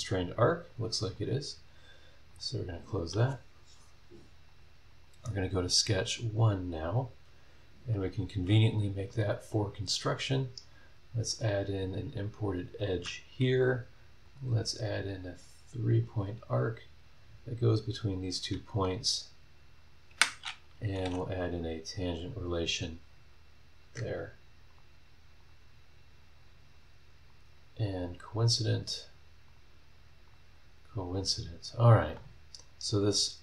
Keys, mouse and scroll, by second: 0.6 click, 2.3 click, 4.4 click, 4.9 click, 5.9 click, 6.6 scroll down 1, 7.1 scroll up 1, 7.8 click, 10.0 click, 10.7 click, 11.3 click, 12.3 click, 12.9 Escape, 14.2 click, 15.9 click, 16.2 scroll down 1, 16.7 scroll up 1, 18.0 click, 19.8 click, 20.1 Escape, 21.0 g, 21.5 click, 22.2 click, 23.5 middle click, 23.8 Escape, 24.7 click, 25.4 click, 27.3 click, 28.1 scroll down 2, 28.5 scroll up 2, 29.5 click, 30.2 click, 31.1 click, 33.0 click.